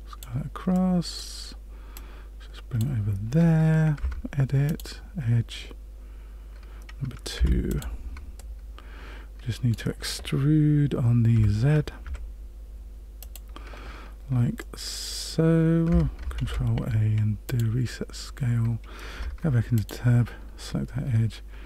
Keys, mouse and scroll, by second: 0.7 middle click, 1.9 click, 3.9 Tab, 4.6 click, 7.3 2, 7.7 click, 8.3 middle click, 11.3 e, 14.6 middle click, 15.8 Tab, 16.4 ctrl+a, 19.1 Tab, 19.7 click.